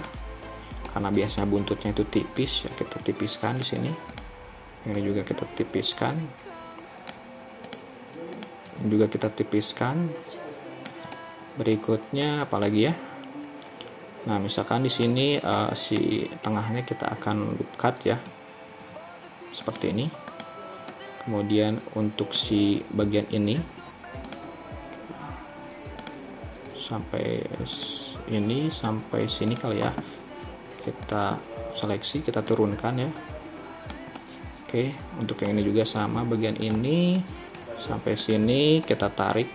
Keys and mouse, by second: 0.9 middle click, 11.3 middle click, 12.3-15.1 middle drag, 15.6 middle click, 18.7 ctrl+r, 21.0-22.5 middle drag, 33.5 right click, 34.2-35.6 middle drag, 37.3 middle click, 38.9 middle click.